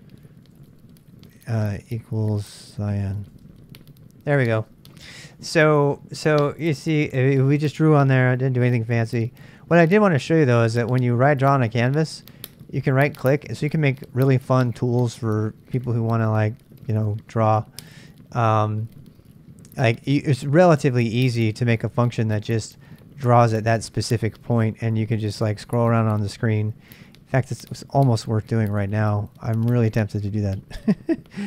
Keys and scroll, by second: 0.0-3.8 typing.